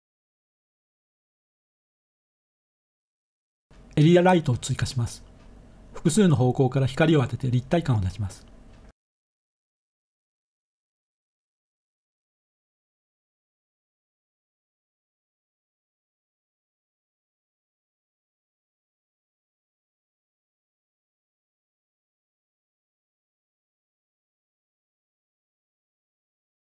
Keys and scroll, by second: 2.4 a, 6.9 g, 7.8 z, 9.4 3, 11.2-13.7 typing, 21.8-22.6 typing, 23.0 Return, 25.4-26.1 typing.